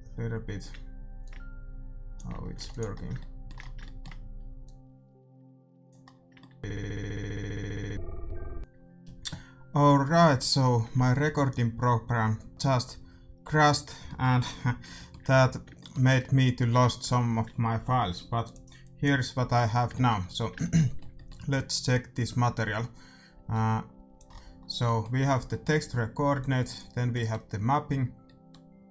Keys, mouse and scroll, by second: 1.3-3.0 drag, 2.7 ctrl+s, 4.6-6.4 drag, 6.4 middle click, 12.2-13.1 scroll up 1, 13.1-17.6 middle drag, 19.4 scroll up 1, 19.9-23.4 middle drag, 23.4 click, 24.2-28.9 middle drag, 26.3-28.0 drag.